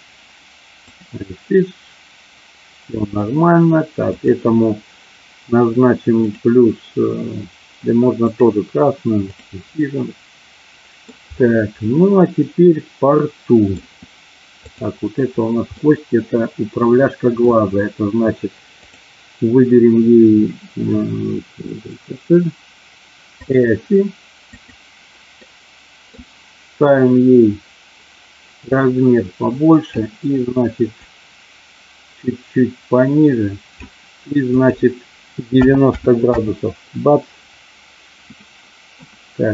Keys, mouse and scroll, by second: 1.0 click, 4.0 click, 6.3 click, 8.3 click, 9.3 click, 10.0-11.0 middle drag, 11.8-13.6 middle drag, 14.6 click, 15.8-17.3 middle drag, 18.9-23.5 drag, 24.6 click, 25.5 middle click, 28.7-29.8 drag, 31.0-33.7 drag, 34.5-36.7 drag, 38.5 middle click.